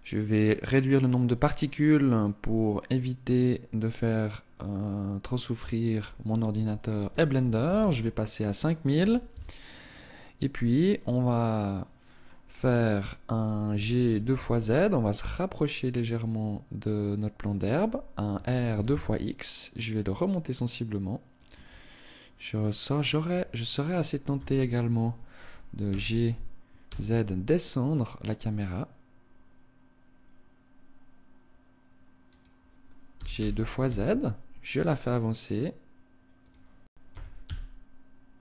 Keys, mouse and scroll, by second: 0.8 click, 10.8 right click, 17.2 click, 17.9 r, 21.0 click, 21.3 middle click, 23.9 KP_0, 25.5 g, 32.0 click, 32.8 g, 36.1 click, 36.6 r.